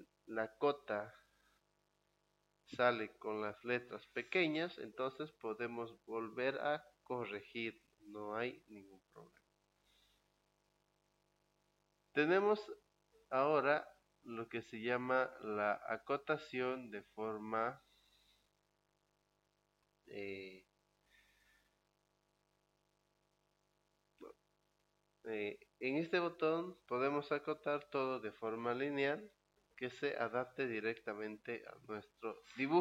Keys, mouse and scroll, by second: 11.6 click, 13.4 click, 15.5 click.